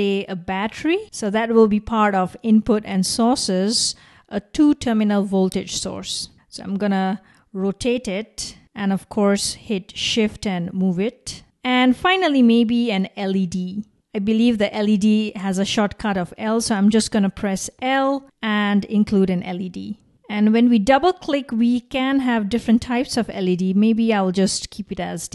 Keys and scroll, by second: 17.5 typing.